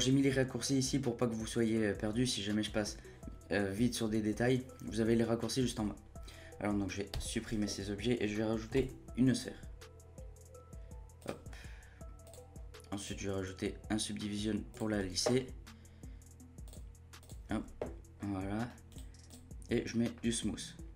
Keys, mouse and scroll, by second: 7.1 Delete, 8.8 shift+a, 18.6-19.8 scroll up 9, 19.8-20.9 scroll down 1.